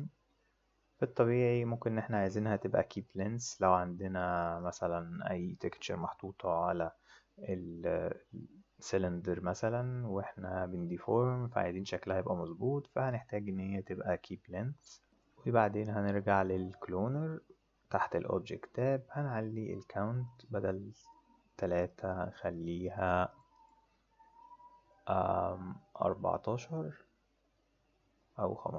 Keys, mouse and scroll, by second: 2.9 click, 16.4 click, 17.8 click, 20.2 click, 21.0 click, 21.5 click, 21.8 click, 22.1 click, 22.2 click, 22.5 click, 22.7 click, 22.8 click, 23.0 click, 23.2 click, 23.5 click, 25.9 click.